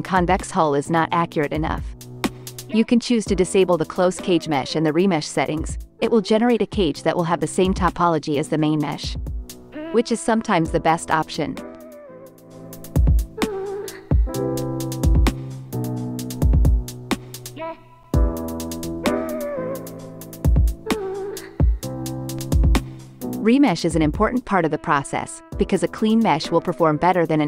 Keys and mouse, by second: 4.7 KP_Divide, 5.1 x, 6.2 ctrl+Tab, 6.6-8.1 drag, 8.5 click, 10.6-12.1 drag, 12.6 ctrl+Tab, 13.4 click, 20.6 KP_Divide, 21.3 x, 24.9 click, 26.6 Tab.